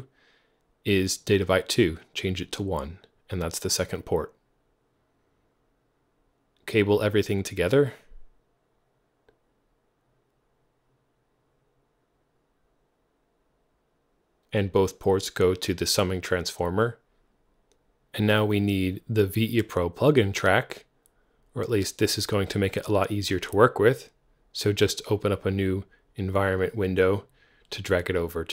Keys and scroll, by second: 2.1 super+w, 10.5 Return, 15.6 super+0, 23.3 super+w.